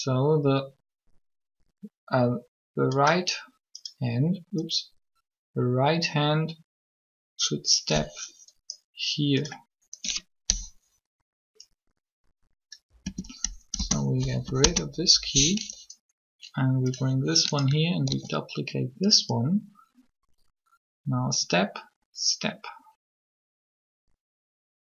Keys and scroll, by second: 13.0 Delete, 13.8 Return, 18.1 shift+d.